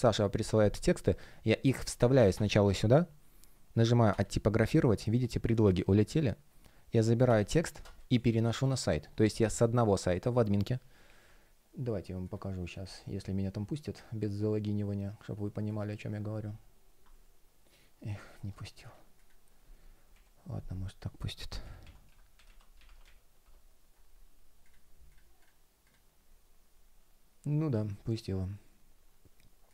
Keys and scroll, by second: 2.5 super+m, 23.4 Return.